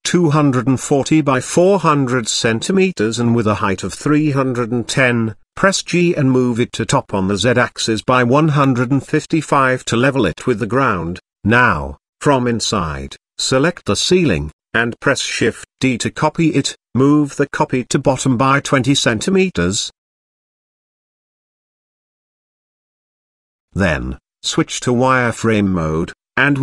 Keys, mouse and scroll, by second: 0.2-2.4 drag, 1.5 KP_0, 2.7-4.4 drag, 4.9-5.3 middle drag, 5.7 middle click, 6.5 g, 9.4-9.9 middle drag, 10.2 shift+middle drag, 10.9-11.5 middle drag, 11.8 middle click, 12.7-13.5 middle drag, 13.7 Tab, 14.2 shift+middle click, 14.8 click, 15.9 click, 17.8 shift+d, 22.6 click, 23.5 z, 24.4 click, 25.0-25.4 middle drag, 25.9 shift+click.